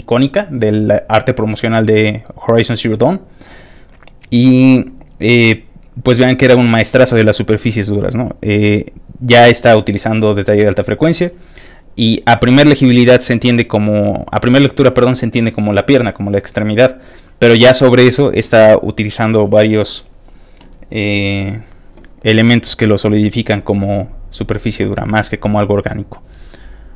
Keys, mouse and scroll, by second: 2.2 middle click, 2.2 scroll down 1, 2.6 middle click, 3.2 middle click, 3.2 scroll down 1, 4.2-4.8 scroll down 2, 5.4-5.9 scroll down 1, 6.4 scroll down 1, 7.5 scroll down 1, 8.3 scroll up 1, 8.4 scroll down 1, 8.9 scroll up 1, 9.2-9.8 scroll down 1, 10.0-10.6 scroll down 2, 11.3-11.7 scroll down 1, 16.1 scroll down 1, 16.9-17.5 scroll up 3, 18.0-18.6 scroll up 3, 19.0 middle click, 22.7 middle click, 23.1 middle click, 23.9 scroll up 3, 24.9 middle click.